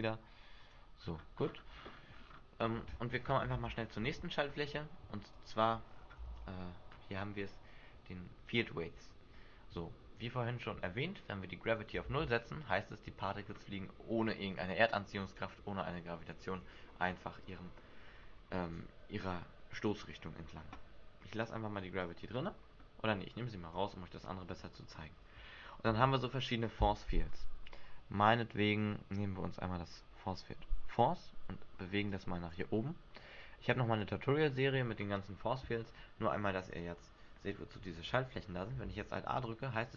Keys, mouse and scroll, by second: 1.1-3.7 scroll down 17, 3.7 alt+a, 4.8 Escape, 5.5 click, 5.9-6.7 scroll down 7, 6.4 alt+a, 9.7 Escape, 11.4 click, 12.2 alt+a, 13.4-14.0 scroll down 7, 14.2-14.5 scroll up 2, 15.3 middle click, 16.7 Escape, 17.1-18.2 scroll up 2, 18.7 scroll up 2, 21.6 click, 23.5 click, 26.0 shift+a, 32.2 click, 33.5 click, 36.9 right click, 38.9 alt+a.